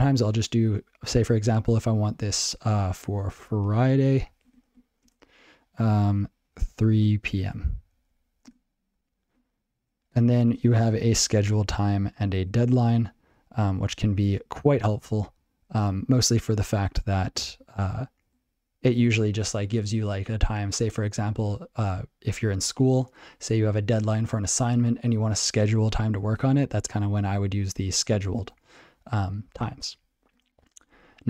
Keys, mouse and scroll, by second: 8.5 Return.